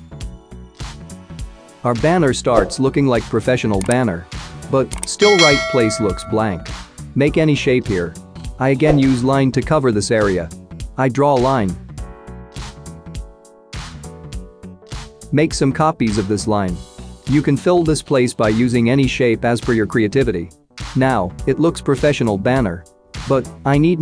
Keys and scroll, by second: 13.2 Return, 15.0 Return.